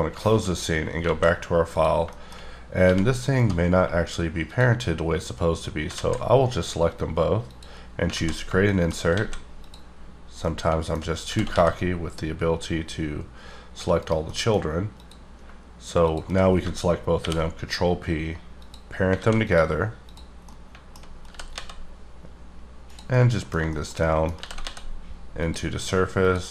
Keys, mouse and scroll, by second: 0.2 shift+middle click, 0.5 shift+scroll up 3, 1.0 alt+a, 1.7 click, 2.1 shift+middle click, 2.5 scroll down 2, 2.8 g, 3.4 right click, 4.5 shift+click, 5.9 alt+z, 7.4 click, 8.1 alt+z, 8.4 shift+scroll down 1, 8.6 shift+middle click, 9.1 alt+a, 9.5 click, 10.0 scroll down 2, 10.3 middle click, 11.2 g, 11.5 z, 14.2 middle click, 14.6 scroll up 2, 14.9 click, 17.1 ctrl+p, 18.5 click, 19.1 alt+a, 19.4 click, 20.1 click, 20.4 middle click, 21.2 g, 22.8 click, 23.1 middle click, 24.0 double middle click, 24.4 g, 24.6 z, 25.4 click, 26.1 click.